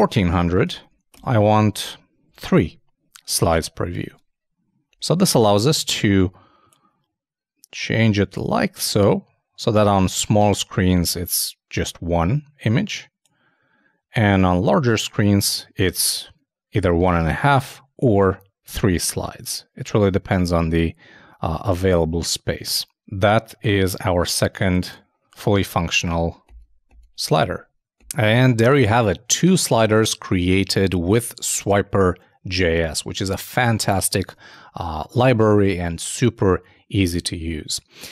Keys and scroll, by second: 0.0-1.2 typing, 2.3 super+3, 4.1 super+Tab.